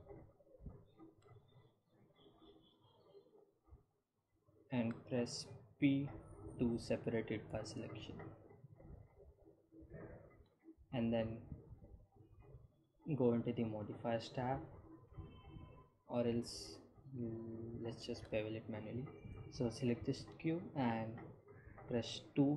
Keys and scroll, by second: 5.9 p, 7.8 Tab, 19.6 Tab, 21.3 2.